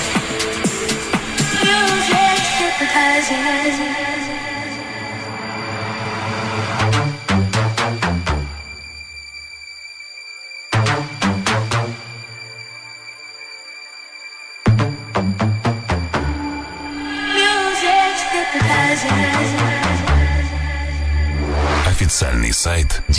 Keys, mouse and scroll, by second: 0.1 g, 0.8 s, 17.5 ctrl+r, 22.1 ctrl+r.